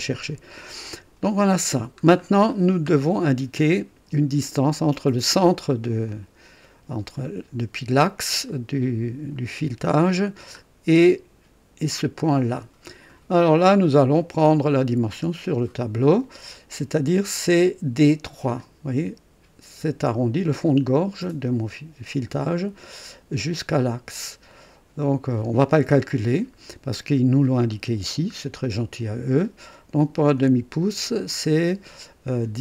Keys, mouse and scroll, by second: 2.5-3.0 scroll down 1, 6.1 right click, 8.5 right click, 10.5-10.8 scroll up 1, 14.2 click, 27.9 scroll down 2.